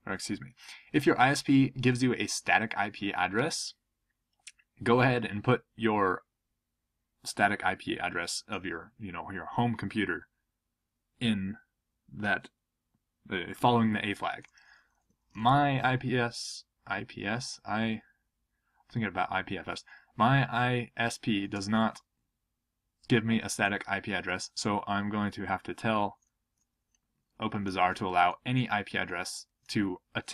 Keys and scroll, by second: 26.2-29.1 typing.